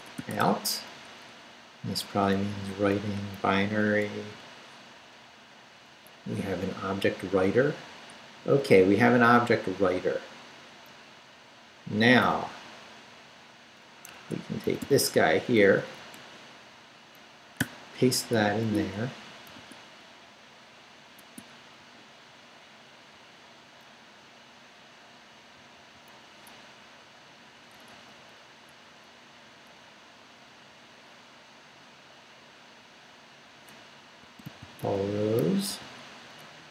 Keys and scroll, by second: 0.0-0.9 typing, 1.4 Right, 3.6 Down, 4.0 Left, 6.8 Down, 9.3 Up, 11.9 Up, 14.1 Escape, 14.6 d, 15.4 Down, 16.0 Up, 17.6 p, 18.6 Tab, 19.5 i, 19.5 Tab, 20.2 Down, 21.2 Tab, 21.8 Right, 23.1 Right, 25.5 Right, 26.5 BackSpace, 27.6 BackSpace, 34.0-36.7 typing.